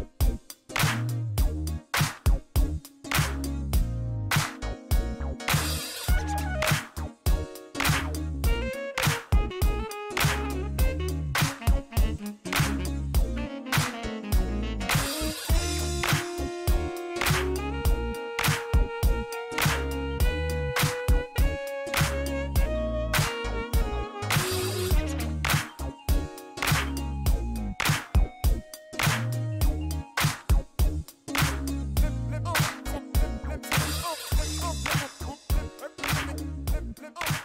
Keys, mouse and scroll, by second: 0.3 click, 2.4 click, 3.3 ctrl+click, 4.6 ctrl+click, 5.7 ctrl+click, 8.6 click, 11.2 click, 13.2 click, 14.5 middle click, 14.9 shift+right click, 16.8 shift+scroll up 1, 18.0 click, 18.6 shift+right click, 20.9 ctrl+click, 22.0 shift+right click, 24.3 click, 25.9 space, 29.2 click, 31.1 click, 32.7 KP_0, 32.9 ,, 33.2 KP_6, 35.3 click.